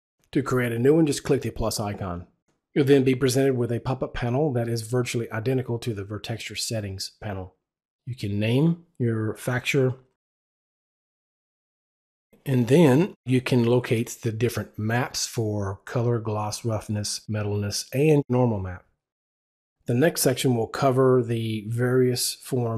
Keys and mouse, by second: 10.2-12.5 typing, 21.3 Return, 21.3 click.